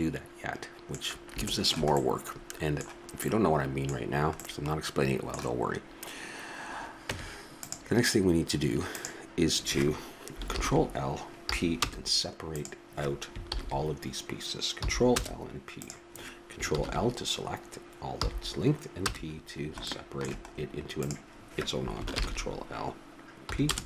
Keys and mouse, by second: 7.0 Tab, 8.9-10.5 drag, 10.5 ctrl+l, 11.5 p, 13.4 ctrl+l, 14.8 p, 15.8-16.8 drag, 16.7 ctrl+l, 18.2 p, 21.0-22.6 drag, 22.1 ctrl+l, 23.5 p.